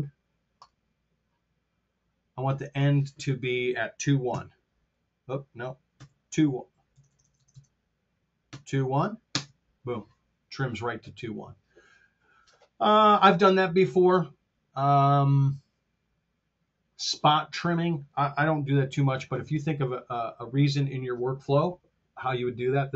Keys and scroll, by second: 4.3 KP_1, 5.9 KP_2, 6.8 KP_0, 9.2 Home, 19.0 super+z.